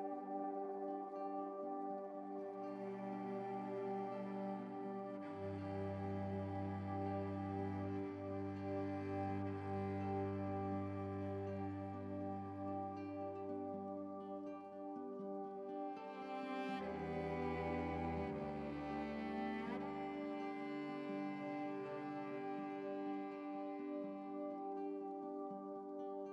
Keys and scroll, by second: 12.7 ctrl+t, 13.0 ctrl+t, 22.6 ctrl+t.